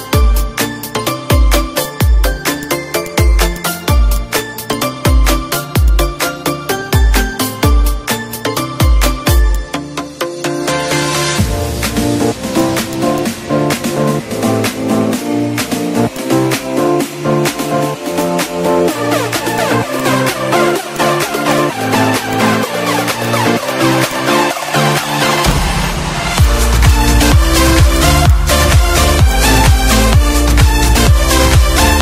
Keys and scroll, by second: 2.3 ctrl+/, 3.4 ctrl+z, 3.9 ctrl+z, 7.0 space, 7.7 ctrl+shift+f, 9.8 ctrl+z, 10.8 ctrl+shift+z, 16.4 z, 17.2 space, 17.9 F4, 19.3 d, 22.1 z, 22.8 F1, 23.9 F1, 27.2 ctrl+shift+a, 28.6 Up, 30.6 ctrl+shift+c.